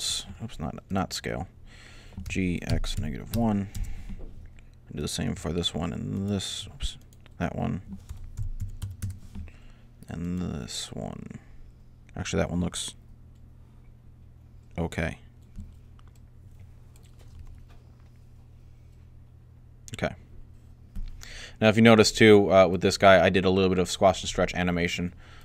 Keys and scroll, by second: 1.0-3.7 typing, 7.6-9.1 typing, 17.2 alt+a.